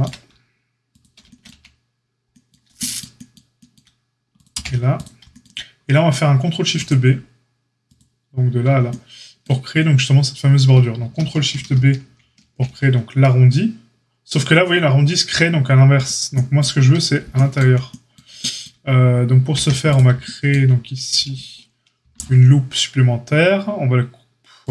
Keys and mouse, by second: 1.4 x, 4.3 click, 4.4-6.7 middle drag, 4.7 x, 6.7-7.9 drag, 7.9-24.7 middle drag, 12.3 ctrl+shift+b, 19.5 a, 21.9 ctrl+r.